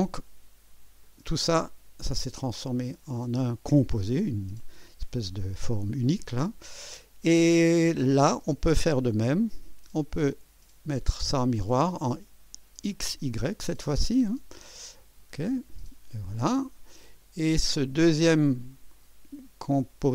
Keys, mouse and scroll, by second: 1.0 click, 1.7-4.8 drag, 4.8-8.1 drag, 10.2 click, 15.0 click, 16.5-17.6 drag, 18.6 click.